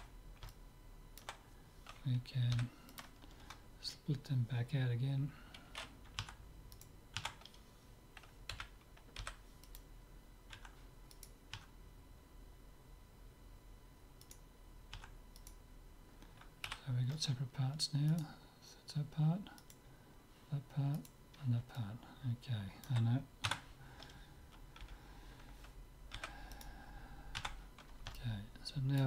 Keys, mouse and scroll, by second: 2.6 p, 6.2 Tab, 6.9-8.7 right drag, 7.3 Tab, 8.7 l, 9.4 p, 10.6 Tab, 11.2-12.9 right drag, 11.6 Tab, 14.3-17.4 right drag, 15.0 Tab, 16.7 z, 18.1-22.9 right drag, 21.8 click, 22.9 middle click, 23.5 Tab, 24.9 l, 26.2 p, 27.4 Tab, 28.2-29.0 middle drag.